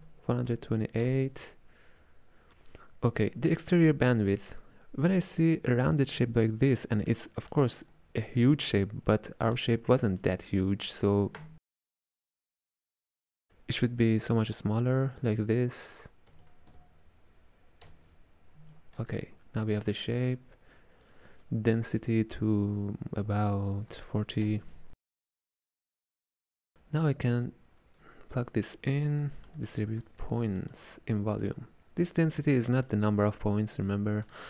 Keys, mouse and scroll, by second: 7.3-11.4 middle drag, 11.4-14.6 drag, 16.5 KP_0, 19.2-21.1 ctrl+middle drag, 21.1-24.3 drag, 25.5 middle click, 26.3 click, 27.4 click, 29.3-33.4 ctrl+middle drag, 33.4 click, 34.0-34.4 middle drag.